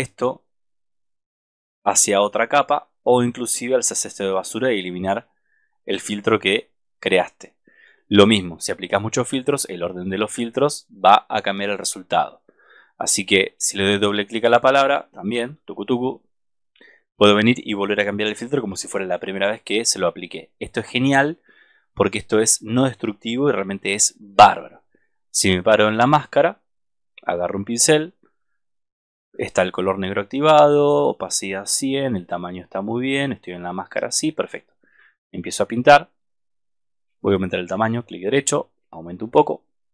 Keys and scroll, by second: 15.4 super+-.